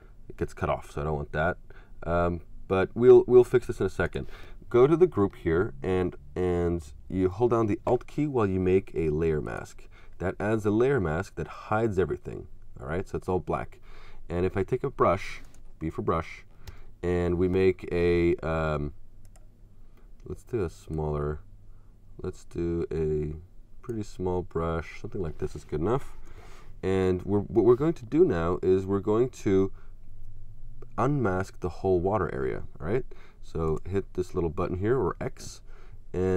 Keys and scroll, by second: 16.7 b, 26.1 Return.